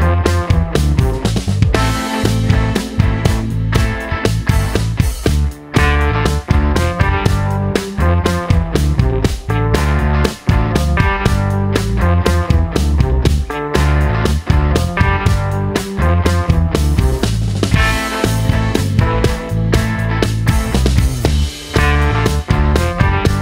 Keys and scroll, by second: 0.8 typing, 9.3 typing, 16.1 d.